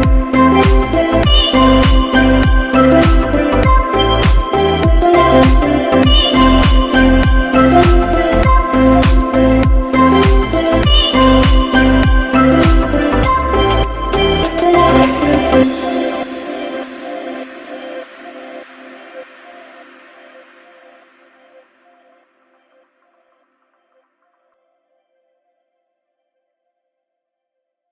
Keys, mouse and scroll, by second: 4.2 middle click, 4.2 click, 4.2 scroll down 2, 4.2 x, 4.4 scroll down 2, 4.8 middle click, 5.5 shift+a, 9.1 scroll down 4, 9.3 middle click, 10.0 shift+a, 13.4 scroll up 4, 14.0 click, 14.9 scroll down 5, 15.2 middle click, 16.1 click, 16.8 click, 18.3 scroll up 3, 18.6 scroll down 2, 19.0 middle click, 19.4 scroll up 2, 19.5 middle click, 20.1 scroll down 1, 20.4 shift+a, 22.3 p, 24.0 click, 25.4 middle click, 25.4-25.7 scroll down 5, 25.8 middle click, 26.2 scroll up 4, 26.4 middle click, 27.0 shift+a.